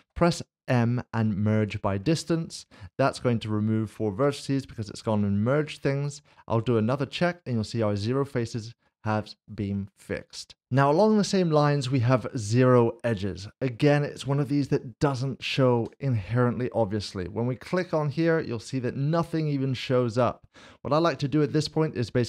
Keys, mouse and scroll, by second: 0.0 typing, 1.6 click, 4.2 click, 9.1 click, 9.4 middle click, 10.6 click, 15.8 Tab, 17.6 click, 18.4 middle click.